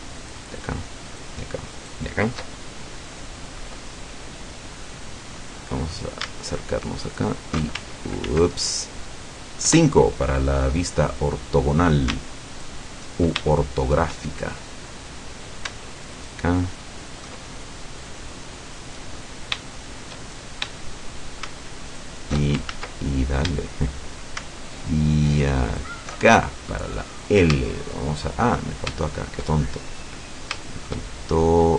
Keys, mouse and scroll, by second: 0.2 alt+shift+right click, 1.1 alt+shift+right click, 1.8 alt+shift+right click, 5.5-5.9 scroll up 2, 7.1 alt+shift+right click, 8.3 ctrl+z, 9.7 KP_5, 11.1-12.0 middle drag, 12.5 alt+shift+right click, 13.5-14.3 alt+shift+middle drag, 14.7 middle click, 16.2 alt+shift+right click, 17.5-17.9 alt+shift+scroll down 1, 18.1-19.4 middle drag, 19.7-21.3 shift+middle drag, 21.9 alt+shift+right click, 22.7 ctrl+alt+shift+z, 23.1-23.4 ctrl+shift+scroll up 1, 23.7-24.5 shift+middle drag, 25.7 alt+shift+right click, 26.3-27.0 alt+shift+scroll down 5, 27.1-28.4 middle drag, 28.8 scroll up 2, 29.1 shift+middle click, 29.5-29.9 shift+scroll up 2, 29.9 middle click, 30.3 scroll up 2, 30.7-31.7 shift+middle drag.